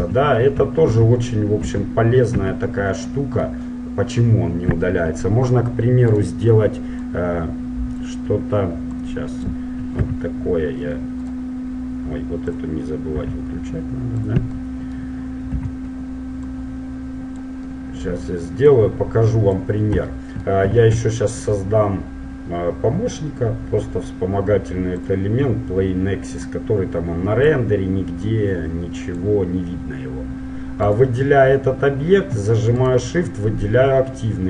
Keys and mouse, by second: 0.2 z, 1.1 ctrl+z, 1.7 ctrl+z, 2.4 ctrl+z, 6.3 right click, 7.2-9.1 drag, 9.3-11.0 drag, 10.2 s, 12.8-14.5 drag, 13.3 s, 14.9 middle click, 15.7 z, 16.7-18.3 drag, 17.9 middle click, 18.4 click, 18.9-20.9 drag, 23.1 shift+a, 25.5-26.7 middle drag, 26.7-30.3 drag, 29.7-32.9 middle drag, 31.0-32.9 right drag, 33.0-34.4 right drag.